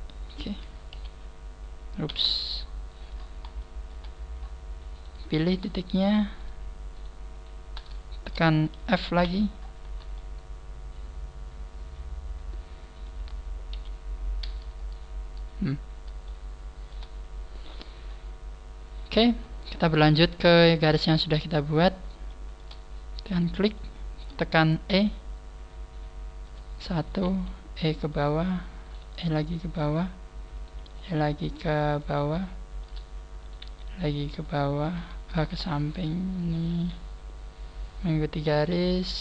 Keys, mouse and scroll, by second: 0.9 KP_1, 2.0 KP_3, 2.4-3.4 scroll down 15, 3.6 shift+middle click, 4.4-4.7 scroll up 2, 4.9 right click, 4.9 scroll up 1, 5.4 shift+right click, 5.7 middle click, 7.3 shift+right click, 7.9 shift+middle click, 9.2 f, 9.5-10.0 scroll down 4, 9.8 a, 10.1 middle click, 13.4 scroll down 3, 13.7 KP_1, 14.2-14.8 scroll down 1, 14.8-15.2 scroll up 3, 15.8 scroll up 2, 16.2 shift+middle click, 18.1 scroll down 2, 18.4-19.4 scroll up 1, 19.4 scroll down 1, 20.5 scroll down 1, 21.8-22.4 scroll up 4, 22.2 shift+middle click, 23.2 right click, 24.0 shift+middle click, 24.9 e, 27.0 right click, 27.2 e, 28.8 right click, 29.0 e, 29.8 click, 30.5 right click, 30.8 e, 33.4 right click, 33.6 e, 35.6 shift+middle click, 36.5 right click, 36.7 e, 38.0 click, 38.5 right click, 38.7 e.